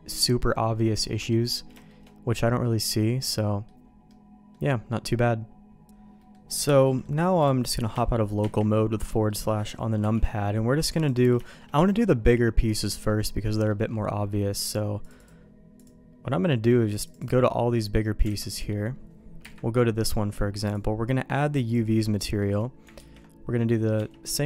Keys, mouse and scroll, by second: 1.8 shift+middle click, 2.3-3.6 middle drag, 4.0 middle click, 6.1 middle click, 6.9 middle click, 7.4 click, 7.7 middle click, 7.9 KP_Divide, 8.4 KP_Divide, 9.1 middle click, 10.0 n, 11.0 click, 11.4 shift+middle click, 11.9 middle click, 12.8 middle click, 13.6 middle click, 15.1 click, 15.7-17.5 drag, 18.2 alt+a, 18.5 click, 19.4 KP_Divide, 21.2 click, 22.1 middle click, 22.9 ctrl+`.